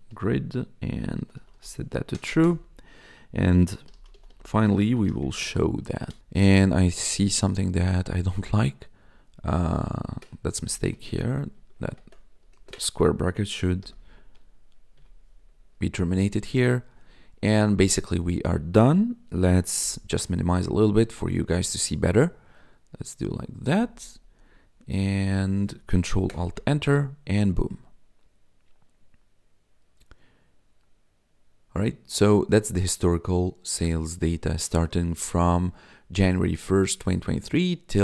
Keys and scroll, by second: 0.0-2.1 typing, 2.4 Return, 3.6-5.9 typing, 6.0 Right, 6.2 Down, 6.7 Up, 8.1 Right, 10.1 Left, 10.6 BackSpace, 11.1 ctrl+Left, 12.3 Right, 12.5 space, 12.6 Left, 13.8 ], 14.2 Right, 14.9 BackSpace, 15.6 Right, 19.8 ctrl+-, 26.3 ctrl+alt+Return.